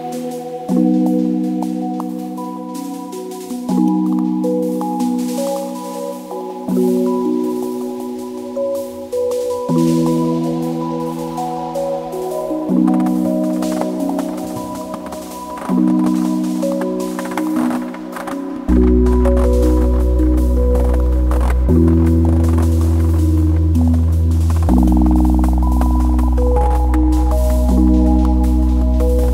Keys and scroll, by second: 0.7 alt+`, 3.1 alt+r, 3.8 alt+s, 7.2-8.9 typing, 11.4-12.4 typing, 14.2 n.